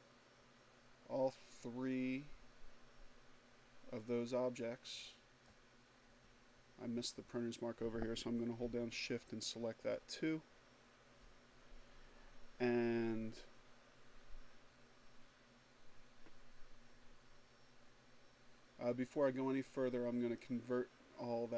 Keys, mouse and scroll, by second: 8.5 shift+click, 20.2 click.